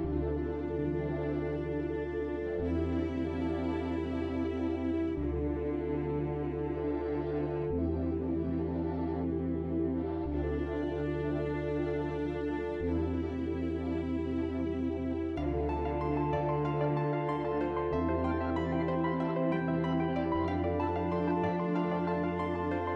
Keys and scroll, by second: 3.1 f, 22.5-22.9 typing.